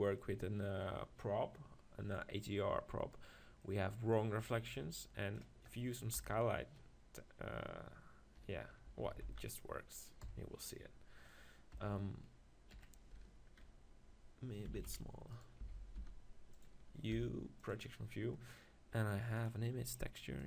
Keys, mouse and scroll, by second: 1.9 middle click, 3.6-4.8 middle drag, 4.8-6.6 drag, 6.2 KP_1, 8.4 KP_4, 8.5 KP_4, 9.0 Tab, 9.3 z, 10.2 KP_4, 11.7 KP_1, 12.9 KP_3, 14.7 s, 15.6 s, 16.6-18.5 drag, 17.1 u.